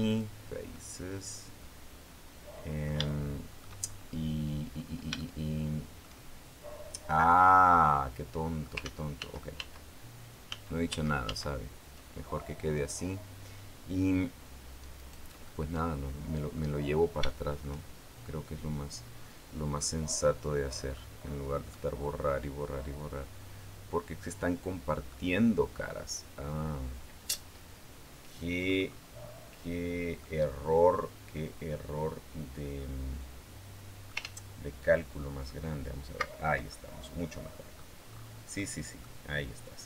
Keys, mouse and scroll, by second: 0.5-2.8 drag, 2.9 shift+click, 4.0-4.8 scroll up 4, 5.0 shift+click, 5.1 shift+middle click, 6.5 middle click, 6.9-8.6 middle drag, 8.6 ctrl+z, 10.2 ctrl+z, 14.8 right click, 15.2-16.6 middle drag, 16.6-17.0 scroll down 2, 17.0 shift+middle click, 19.6-20.9 middle drag, 20.9-21.4 scroll up 2, 21.5-24.9 drag, 27.4-28.0 scroll down 1, 28.4-28.9 scroll up 1, 28.9 middle click, 29.0-29.6 scroll down 1, 29.6 middle click, 30.0-34.1 drag, 34.0 ctrl+z, 36.5 ctrl+click, 36.8 middle click, 37.8-38.2 scroll up 2, 38.4 middle click.